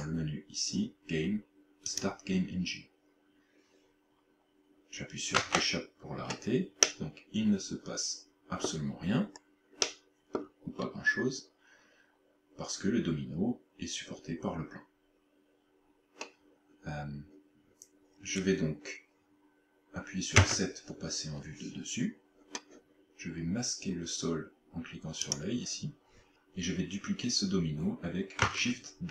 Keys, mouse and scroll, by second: 5.4 click, 6.8 middle click, 9.2-9.6 scroll up 4, 9.9 middle click, 10.8-11.2 scroll up 2, 20.5 KP_7, 25.2 click.